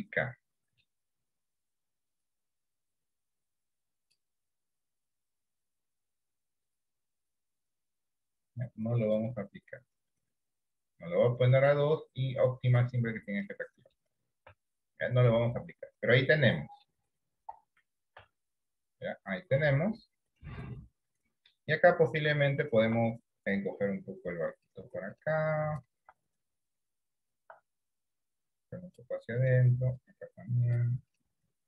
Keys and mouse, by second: 2.2 click, 4.0 click, 6.7 click, 7.7 click, 13.6 middle click, 14.6 Tab, 15.0-17.0 middle drag, 17.5 KP_1, 18.3 Tab, 23.6-24.8 drag, 27.9-29.0 drag, 30.1 click.